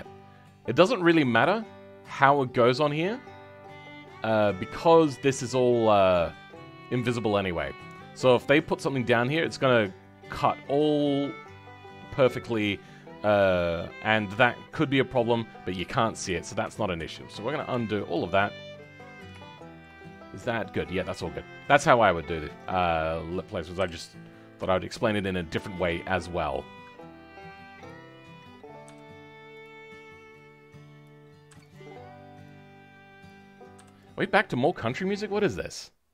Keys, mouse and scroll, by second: 0.7-1.0 scroll down 10, 1.0-16.2 middle drag, 16.2 ctrl+z, 16.6 ctrl+z, 19.0-19.3 scroll up 5, 19.3 shift+middle click, 20.5-22.4 scroll down 10, 22.4-23.7 drag, 23.7 KP_7, 24.2 scroll up 2, 24.7 shift+middle click, 25.6 scroll up 9, 25.9-27.8 shift+middle drag, 27.8 click.